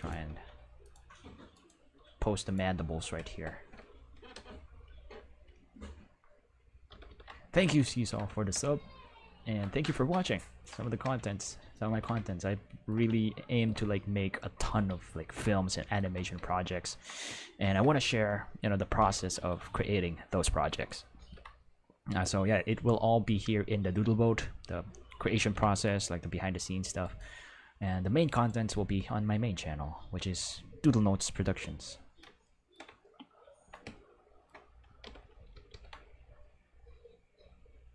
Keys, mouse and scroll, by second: 0.1 r, 0.3 r, 0.8 click, 1.5 right click, 1.9 r, 2.4 click, 4.3 q, 5.3 q, 6.9 ctrl+s, 7.0 ctrl+s, 11.6 ctrl+middle click, 11.9 ctrl+s, 15.0 ctrl+middle click, 15.6 shift+middle click, 16.4 ctrl+middle click, 19.3 ctrl+s, 21.1 ctrl+s, 25.3 ctrl+Tab, 25.8 right click, 27.0 right click, 28.3 right click, 33.0-34.2 ctrl+middle drag, 35.0 ctrl+s.